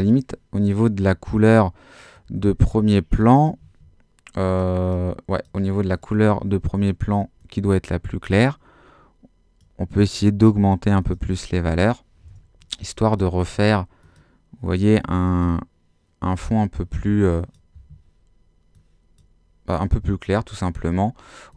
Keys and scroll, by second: 3.6 Escape.